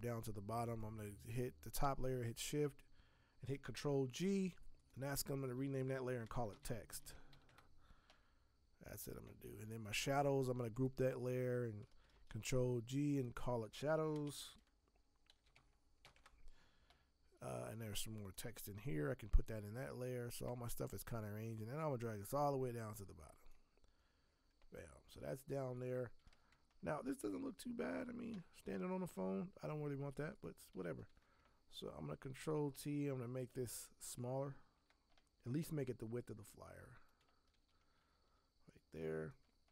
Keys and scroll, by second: 3.8 ctrl+g, 6.0-7.8 typing, 12.1 ctrl+g, 13.9-16.5 typing, 31.1 ctrl+t, 37.5 ctrl+t.